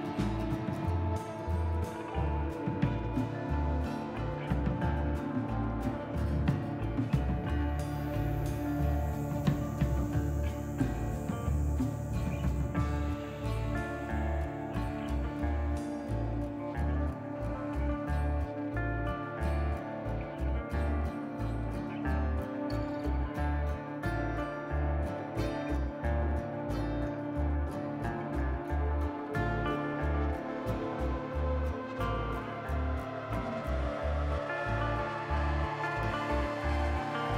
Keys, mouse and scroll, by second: 1.7-2.0 scroll down 2, 1.9 middle click, 2.5-3.6 scroll up 3, 3.6 middle click, 3.6-4.5 scroll up 1, 14.0 scroll up 2, 14.7 middle click, 15.3 shift+middle click, 17.6 click, 17.9 middle click, 18.9 click, 19.3 shift+click, 19.7 middle click, 20.7 g, 21.9 click, 22.7 click, 23.1 g, 24.5 click, 25.4 g, 26.3 click, 26.5 middle click, 27.1-28.7 scroll down 11, 27.6 middle click, 28.7-29.5 scroll up 5, 29.2 middle click, 30.3-31.2 scroll up 2, 30.7 middle click, 31.2 scroll up 2, 31.4 middle click, 31.9 g, 35.2 click, 35.6 g, 37.2 click.